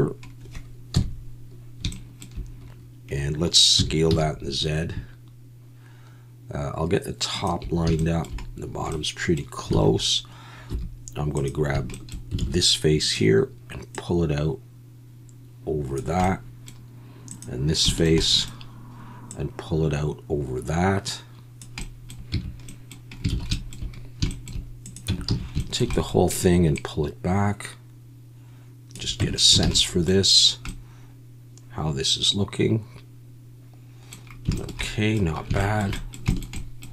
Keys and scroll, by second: 0.9 KP_1, 3.8 s, 4.1 z, 9.8 alt+a, 10.7 3, 12.4 alt+a, 22.3 Tab, 23.3 alt+a, 25.1 Tab, 25.3 a, 29.2 Tab, 29.6 alt+a.